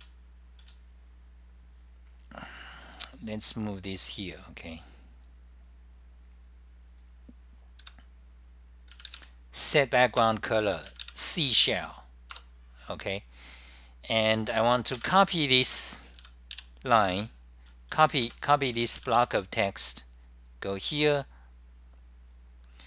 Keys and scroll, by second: 0.0-0.5 typing, 5.4-8.4 typing, 10.1-10.8 typing, 12.5 Return, 13.5-20.4 typing, 22.3-22.8 typing.